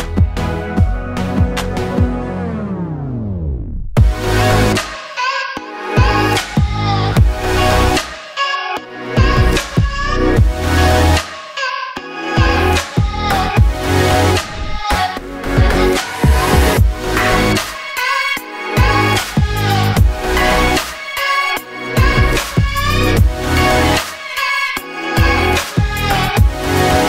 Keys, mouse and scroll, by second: 0.0 click, 0.7 ctrl+r, 2.4 s, 3.4 ctrl+z, 4.1 s, 4.8 click, 5.2 shift+r, 5.6 click, 5.9 ctrl+r, 6.9 s, 7.9 ctrl+z, 11.6 3, 11.9 alt+click, 12.4 click, 13.0 e, 14.3 s, 15.4 click, 15.7 shift+middle click, 16.0 click, 16.6 2, 16.8 click, 17.0 ctrl+r, 18.8 click, 19.3 ctrl+r, 20.0 click, 20.5 3, 20.9 alt+click, 22.4 e, 23.7 click, 24.0 s, 25.1-26.1 scroll down 1.